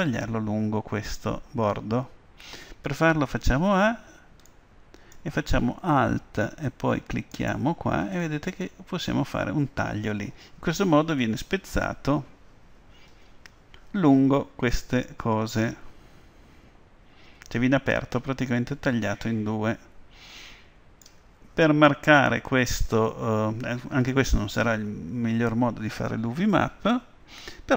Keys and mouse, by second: 3.2 a, 4.5-6.3 middle drag, 7.4 right click, 8.2-10.3 middle drag.